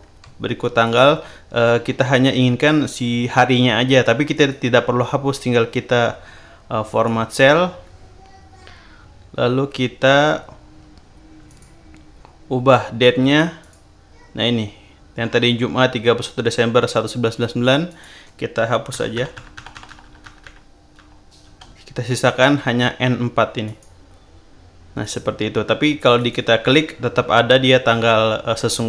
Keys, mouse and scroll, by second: 0.8 shift+click, 4.3 right click, 6.8 click, 11.4 click, 13.6 click, 17.8 click, 18.9 BackSpace, 23.6 click, 25.0 click, 26.1 click.